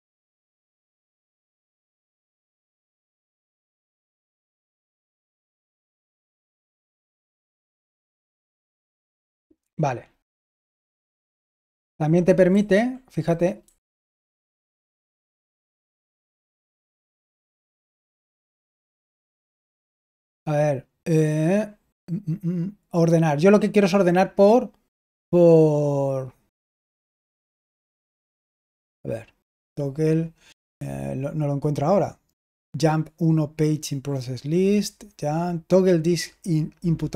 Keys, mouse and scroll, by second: 4.6 Left, 6.2 super+h, 7.0-7.5 typing, 10.8 Right, 12.4 Up, 13.5 Left, 17.2 Up, 19.4 super+l.